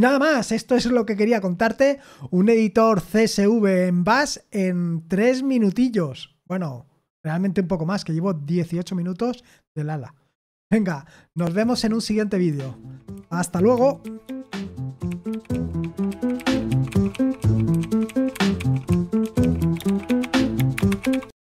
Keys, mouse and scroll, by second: 11.3 super+x.